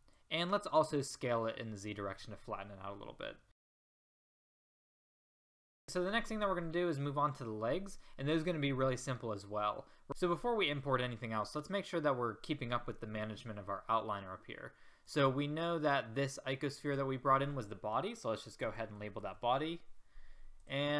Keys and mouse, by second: 1.5 middle click, 1.6-2.1 drag, 3.5 s, 4.2-4.5 drag, 4.5 s, 5.2 drag, 5.4 s, 5.8 a, 15.1-16.1 drag, 16.1-20.6 right drag.